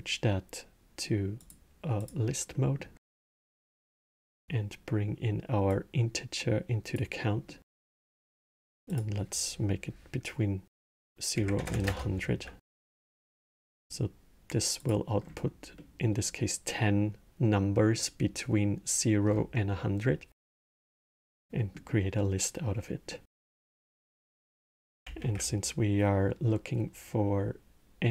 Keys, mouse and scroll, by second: 1.1 click, 1.7 click, 2.3 middle click, 2.8 scroll, 3.6-5.4 middle drag, 5.4 click, 7.2 middle click, 7.8 scroll, 8.6-11.4 drag, 11.4 KP_0, 13.0-14.5 middle drag, 14.5 click, 15.0 scroll, 15.5-19.1 middle drag, 19.1 scroll, 20.2 middle click, 20.9 scroll, 21.3-24.9 middle drag, 24.9 shift+a.